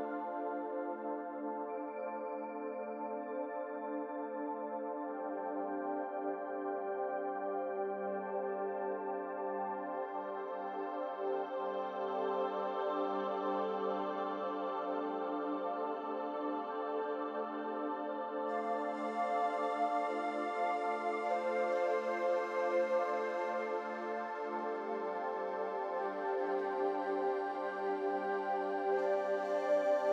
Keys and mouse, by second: 4.6-6.1 middle drag, 11.5 click, 12.4-14.0 middle drag, 15.3 Tab, 16.1 click, 17.8 alt+shift+click, 20.3 u, 22.9 3, 24.0-25.2 drag, 26.3 shift+click, 27.8-28.5 shift+drag.